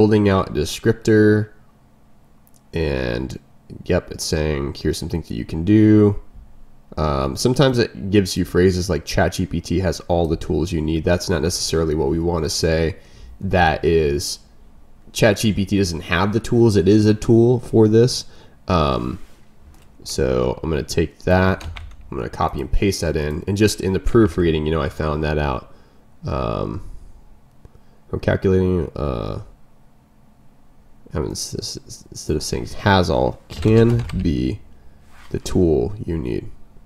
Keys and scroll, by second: 10.4 ctrl+m, 21.5 ctrl+m, 32.5 ctrl+m.